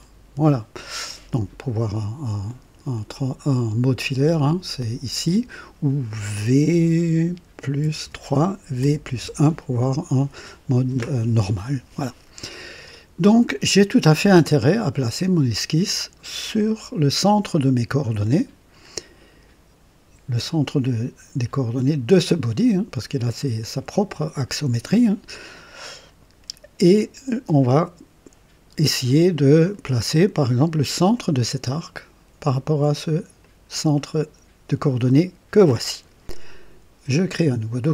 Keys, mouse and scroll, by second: 0.0 typing, 0.7 right click, 4.0 click, 5.5 click, 7.8-9.3 typing, 12.0-12.8 drag, 12.9-13.9 drag, 14.1 click, 14.6 typing, 14.7 click, 18.2 click, 25.1 click, 33.4-35.9 drag, 37.3 click.